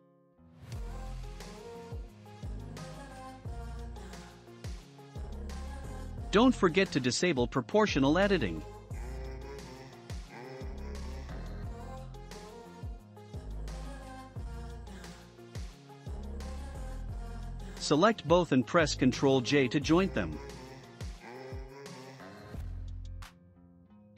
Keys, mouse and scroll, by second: 0.5 Tab, 0.9-1.3 scroll up 5, 1.3-3.0 shift+middle drag, 3.0 3, 3.2 click, 3.8 shift+middle click, 4.4-5.1 scroll down 5, 5.1 click, 7.2 click, 8.1-9.6 drag, 11.6 click, 12.3-12.9 scroll down 4, 12.9 shift+middle click, 13.8-14.5 scroll up 1, 14.5 middle click, 15.4 Tab, 16.1 click, 18.2 click, 19.4 shift+click, 21.1 ctrl+j, 22.2 scroll up 2, 23.1-24.0 shift+middle drag, 23.1 scroll up 1, 24.0 Tab.